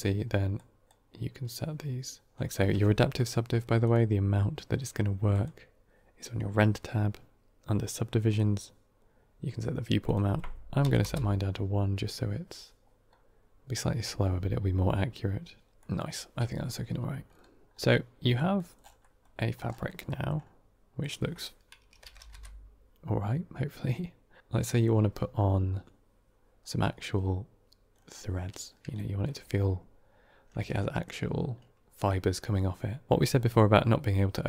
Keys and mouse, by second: 0.4 drag, 5.3 click, 8.2 click, 9.9-12.2 drag, 15.7 middle click, 18.3 middle click, 18.9 middle click, 19.2 middle click, 19.9 middle drag, 20.9-24.4 drag, 22.1 KP_0, 24.6 middle click, 28.8 shift+middle drag, 30.6 shift+middle click.